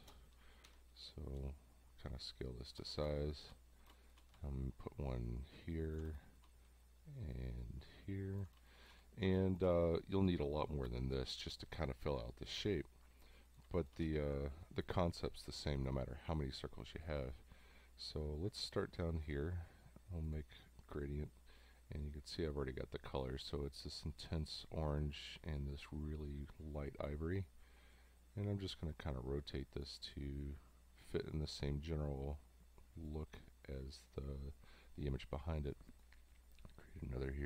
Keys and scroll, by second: 0.7 v, 3.1 space, 6.1 space, 8.6 space, 9.3 space, 13.7 space.